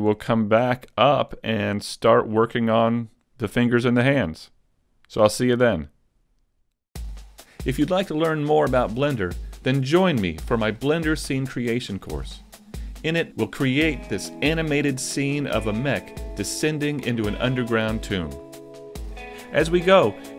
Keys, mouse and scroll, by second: 0.3 shift+middle click.